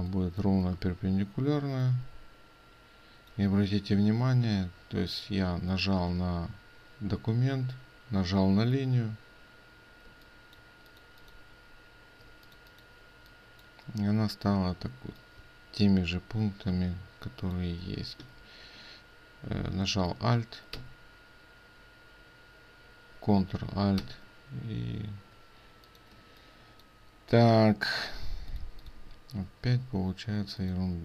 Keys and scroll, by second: 20.8 ctrl+d, 24.1 ctrl+d.